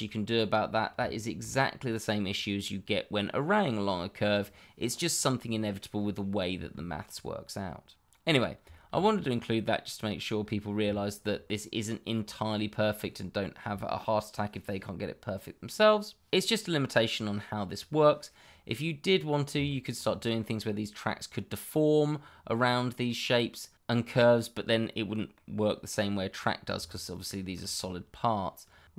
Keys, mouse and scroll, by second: 0.2 middle click, 1.2 shift+middle click, 1.7 scroll down 1, 2.2-2.9 scroll up 1, 8.2-8.6 scroll down 1, 8.7 shift+middle click, 8.8 middle click, 8.9 shift+middle click, 10.4 scroll up 1, 10.9 shift+middle click, 11.0 middle click, 11.1 shift+middle click, 19.6 shift+middle click, 19.7 middle click, 19.8 shift+middle click, 24.8 middle click, 26.7 middle click, 26.9 middle click, 27.0 shift+middle click.